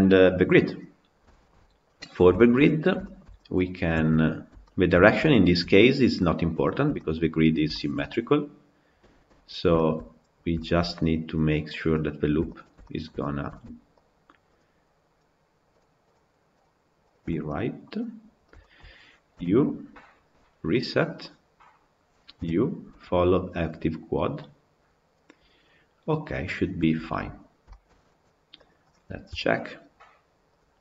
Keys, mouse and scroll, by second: 0.4-1.7 scroll down 7, 1.2 shift+middle drag, 1.7-2.7 middle drag, 2.7 scroll down 1, 2.9-3.5 shift+middle drag, 3.5 click, 3.9 Tab, 4.2 scroll up 1, 4.5-5.5 shift+middle drag, 5.5-6.0 scroll down 3, 6.0-7.2 middle drag, 7.2-7.6 scroll up 2, 7.6-8.6 shift+middle drag, 8.6 scroll down 3, 8.9-9.9 shift+middle drag, 9.9-10.4 scroll up 5, 10.4-11.5 shift+middle drag, 11.5 click, 12.4 shift+click, 12.7-13.9 middle drag, 13.9 shift+click, 14.4 shift+click, 15.9 shift+click, 17.0 shift+click, 17.3 middle click, 18.2 scroll up 1, 18.4-20.9 shift+middle drag, 20.9 u, 24.6 u, 26.8 Tab, 27.5-28.5 shift+middle drag, 28.5 click, 29.1 KP_Decimal.